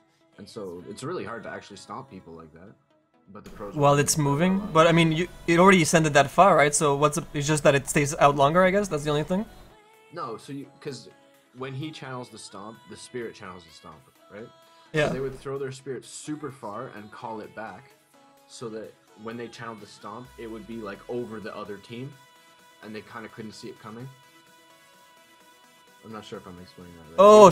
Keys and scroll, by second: 7.2 ctrl+z, 24.8 ctrl+z, 25.4 s.